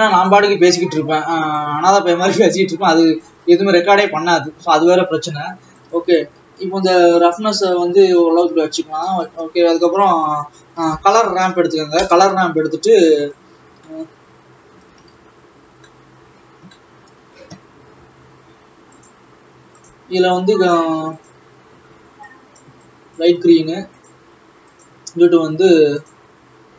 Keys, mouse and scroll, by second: 0.0 click, 3.8 click, 4.8 ctrl+s, 6.9-12.0 drag, 19.6 click, 20.0-26.7 click.